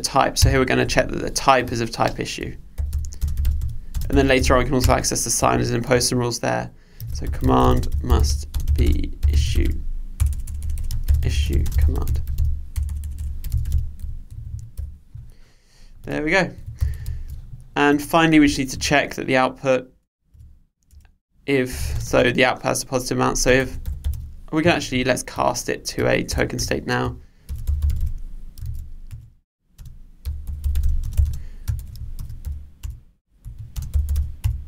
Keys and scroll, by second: 0.4 Return, 4.9 Return, 17.2 super+s, 29.1 Return.